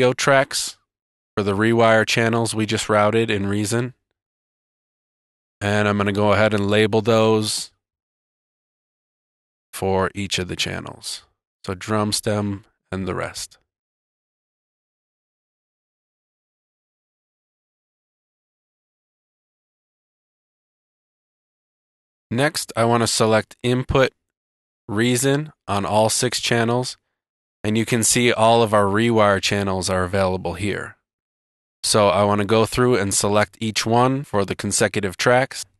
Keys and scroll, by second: 1.3 super+t, 7.2 super+r, 12.1 super+r, 12.3 space, 12.6 super+r, 12.8 space, 13.2 super+r, 14.1 super+r, 14.4 space, 15.1 Tab, 15.7 space, 17.1 Return, 20.0 Return.